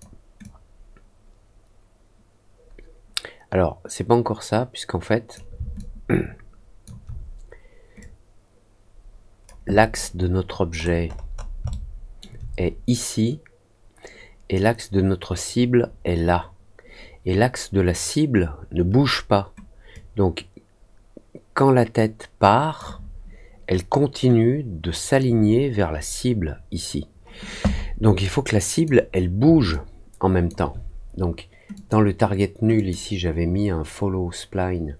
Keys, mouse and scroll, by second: 0.3-5.3 drag, 5.7-6.8 alt+drag, 7.9-9.4 drag, 10.7 middle click, 11.0 middle click, 11.3 middle click, 11.6 alt+middle click, 19.9-22.7 drag, 28.2 click, 29.6 alt+click, 31.7 click, 32.7 click.